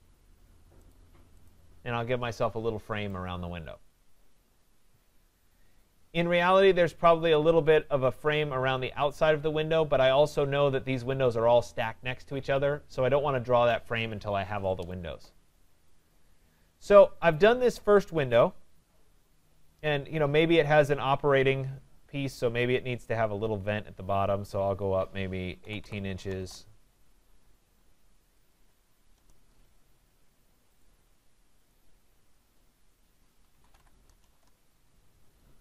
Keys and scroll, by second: 26.4 Return, 34.3 shift+Return.